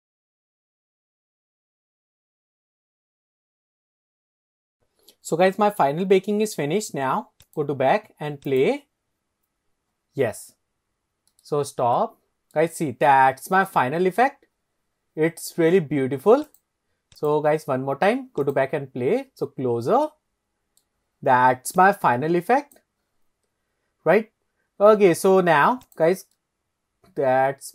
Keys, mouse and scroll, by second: 7.5-7.8 drag, 8.5-8.8 drag, 10.8 scroll down 2, 11.4 middle click, 12.1-12.7 middle drag, 13.8-14.3 shift+middle drag, 16.6 click, 17.2 click, 18.4-18.8 drag, 19.0-19.3 scroll up 2, 20.2 middle click, 21.9-22.9 drag, 26.0 click, 26.4-27.7 middle drag.